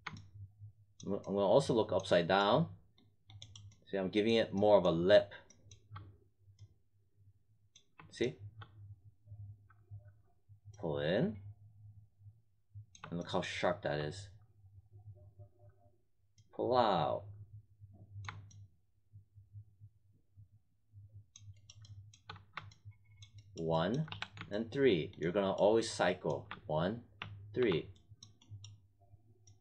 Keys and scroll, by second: 22.3 1, 24.0 3, 26.4 1, 27.1 3.